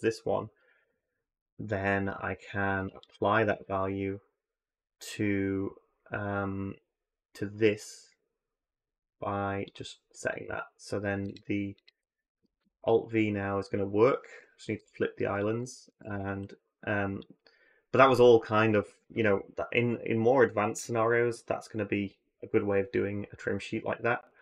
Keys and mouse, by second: 3.0-3.3 drag, 11.5 alt+click, 12.4 alt+v, 15.7 a, 15.8 a, 16.9 click.